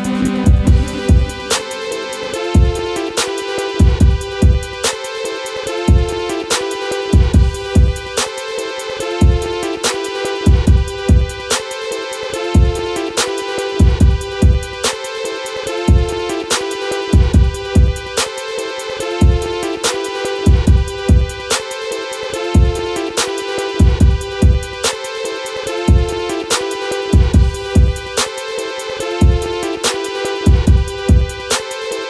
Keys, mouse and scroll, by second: 0.8 click, 1.5 ctrl+x, 1.7 ctrl+click, 2.8 ctrl+v, 3.3 click, 5.0 click, 6.7 scroll up 1, 7.7 click, 8.9-14.8 drag, 14.8 ctrl+z, 15.3-17.9 drag, 20.4-21.6 scroll down 1, 21.6 F12, 22.5 click, 27.2 right click, 27.7 click, 28.5 scroll down 1, 28.8 click, 29.1 scroll up 1, 30.7 click, 31.6 right click.